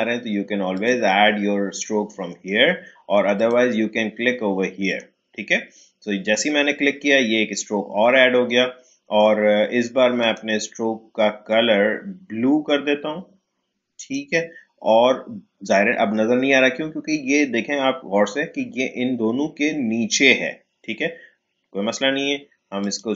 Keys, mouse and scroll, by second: 0.7 click, 3.3 click, 10.2 click, 13.9 click, 22.8 click.